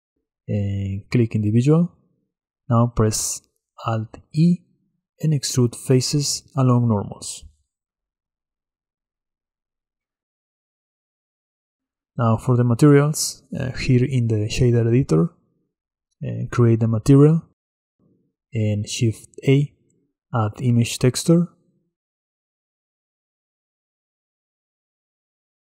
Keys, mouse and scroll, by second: 4.0 alt+e, 9.2-11.6 middle drag, 11.6-16.4 drag, 17.5 click, 18.6 click, 20.4 shift+a.